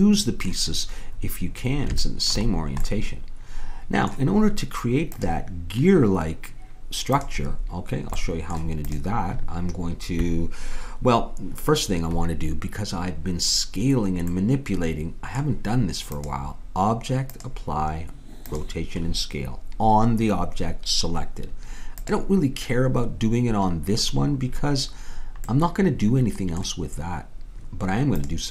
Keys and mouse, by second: 3.0-5.2 middle drag, 8.2 middle click, 8.9-10.6 drag, 14.4-16.1 middle drag, 19.8-22.0 middle drag, 22.0-23.8 drag, 25.1-28.2 middle drag, 28.2-28.5 drag.